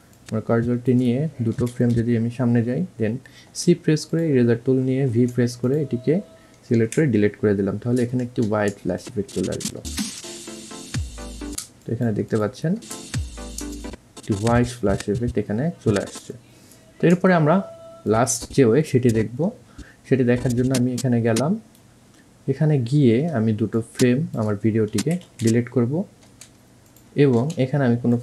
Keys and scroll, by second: 1.8 Right, 2.0 Right, 3.8 c, 7.1 Delete, 10.1 space, 25.2 Right, 25.6 Right, 26.5 c.